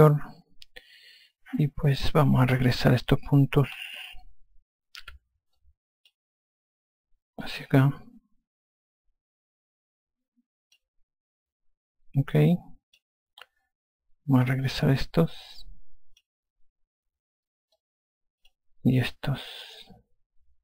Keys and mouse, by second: 5.4 5, 6.0 click, 7.8 click, 12.9 click, 14.8 click, 18.1 click, 20.1 click.